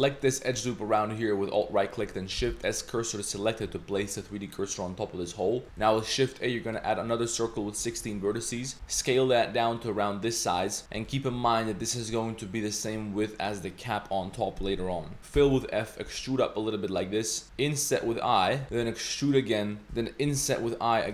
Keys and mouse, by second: 0.2 alt+click, 2.4 shift+s, 3.7 Tab, 4.2 click, 4.7 click, 5.2 drag, 5.6 shift+a, 7.8 Tab, 8.0 1, 8.8 s, 10.8 s, 11.3 Tab, 12.1 middle click, 12.4 middle drag, 15.2 middle click, 15.2 s, 15.4 f, 16.0 e, 17.4 i, 18.6 s, 18.7 e, 20.3 i.